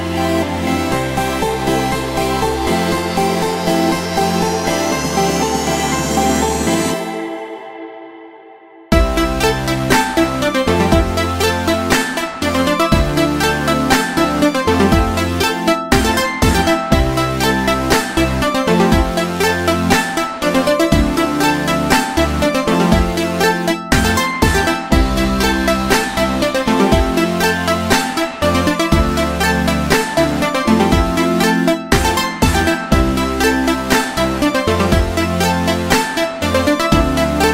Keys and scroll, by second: 13.0 ctrl+z, 32.8 ctrl+c.